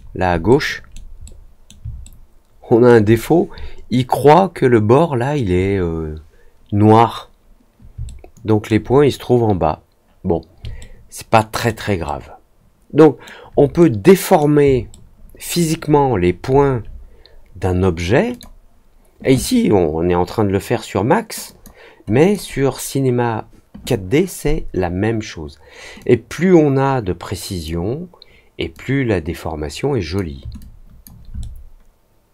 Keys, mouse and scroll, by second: 0.4 alt+middle click, 1.2 middle click, 2.0 alt+middle click, 8.0 alt+middle click, 10.7 alt+middle click, 12.0-13.2 alt+middle drag, 13.7 middle click, 14.8 alt+middle click, 18.2 click, 21.4 click, 22.1 click, 25.9-27.6 drag, 28.7-30.1 drag, 30.5 alt+click, 31.3-32.3 alt+middle drag.